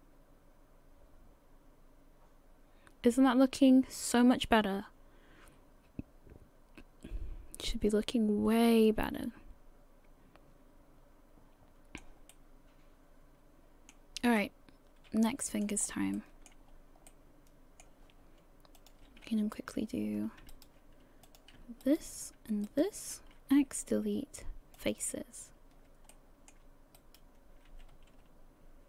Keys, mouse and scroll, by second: 12.3 middle click, 14.4 middle click, 15.8 scroll up 3, 16.1 shift+middle click, 16.3 shift+middle click, 16.7 scroll up 2, 17.1 middle click, 18.8 click, 19.5 alt+right click, 20.7 alt+right click, 21.3 click, 21.8 alt+right click, 22.7 alt+shift+right click, 23.1 alt+shift+right click, 23.5 x, 26.1 shift+middle click, 27.0 right click.